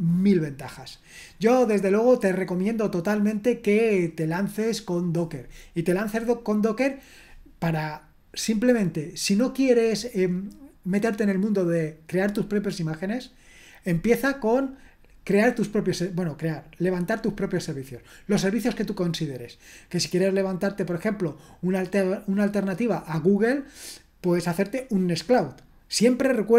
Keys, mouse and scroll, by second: 0.2-0.7 scroll down 2, 0.7-2.0 scroll down 1, 2.0-3.1 scroll down 1, 3.1-3.7 scroll down 1, 3.7-26.5 scroll down 1.